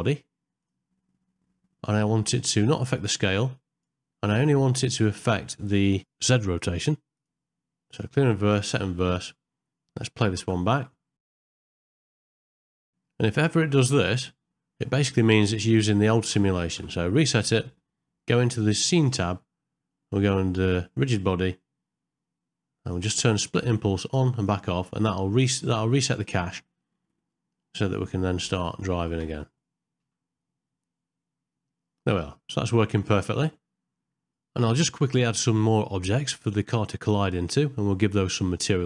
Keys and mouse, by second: 6.9 click, 7.9 click, 8.5 click, 10.4 KP_0, 11.4 space, 11.4 click, 11.6 g, 12.5 shift+Left, 12.9 g, 16.3 space, 16.7 shift+Left, 24.0 click, 29.2 space, 30.0 g, 34.7-35.2 typing, 34.9 middle click, 35.2 middle click, 35.3 ctrl+middle click, 35.5 middle click, 35.8 click, 36.0 middle click, 36.1 right click, 36.3 right click, 36.3 shift+middle click, 36.4 click, 36.5-37.1 typing, 36.5 ctrl+middle click, 36.8 middle click, 37.1 middle click, 37.3 click, 37.6 click, 38.3 click.